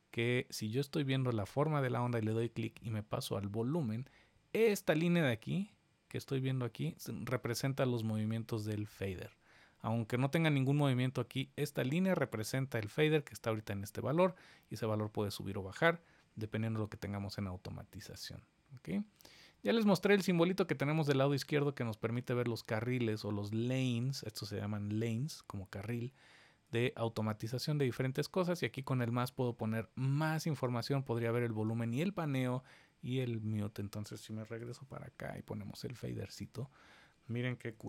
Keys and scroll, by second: 34.5 super+=, 37.7 super+=.